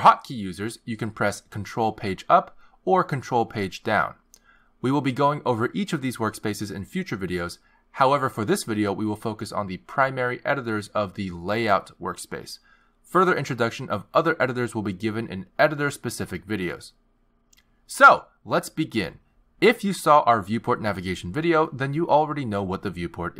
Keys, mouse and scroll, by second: 3.8 ctrl+Page_Down, 3.8 click, 5.3 ctrl+Page_Down, 5.3 ctrl+Page_Up.